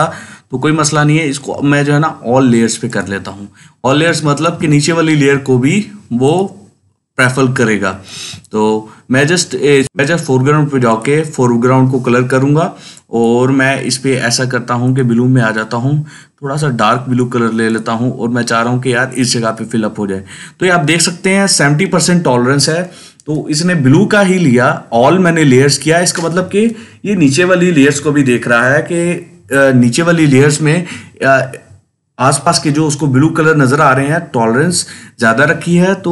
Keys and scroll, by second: 8.0 ctrl+z.